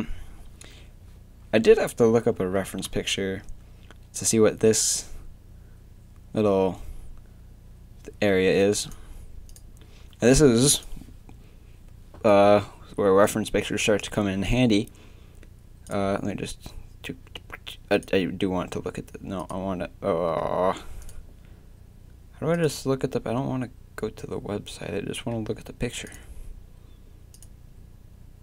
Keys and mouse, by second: 0.3-2.6 middle drag.